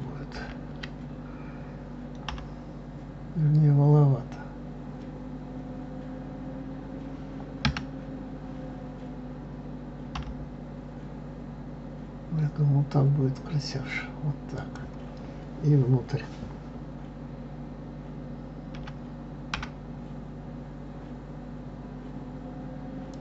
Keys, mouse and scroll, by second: 0.4 ctrl+z.